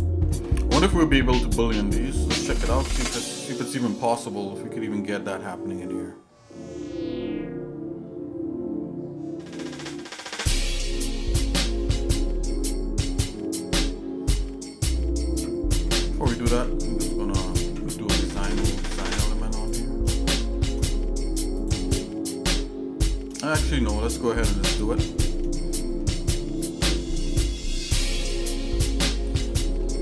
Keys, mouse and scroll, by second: 0.5-2.0 shift+middle drag, 2.5 shift+click, 4.3-13.3 shift+middle drag, 15.3 Tab, 15.8 Tab, 16.2 click, 16.5 Tab, 17.6 ctrl+Tab, 19.6 click, 20.3 shift+middle click, 21.5 click, 22.5 shift+middle click, 23.7 Tab, 24.9 Tab, 25.5 shift+middle click, 26.4 shift+middle click, 27.0 middle click, 27.6 shift+middle click, 28.1 middle click, 28.6 Tab, 29.6 shift+middle click.